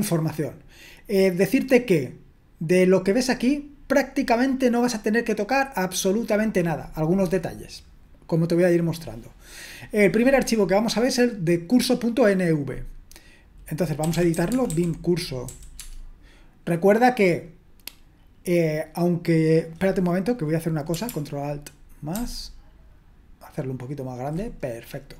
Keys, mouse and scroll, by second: 13.8-15.5 typing, 15.8 Tab, 22.2 ctrl+alt++.